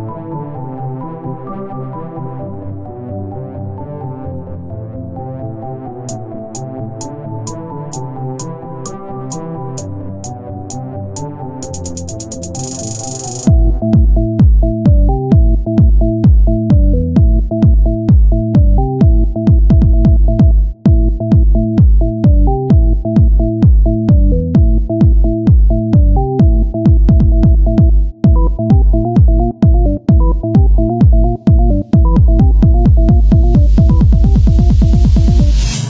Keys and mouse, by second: 0.0-1.0 right drag, 1.9 o, 2.3 s, 3.7-4.9 drag, 9.0-10.8 right drag, 10.8-15.8 drag, 16.4 Tab, 17.4 click, 18.0 s, 19.8-22.3 drag, 20.8-22.0 right drag, 22.3 Tab, 23.9 z, 26.6 s, 27.8 s, 29.5-32.9 drag, 33.0-34.2 drag, 34.2 s, 35.0 z, 35.4-35.8 drag.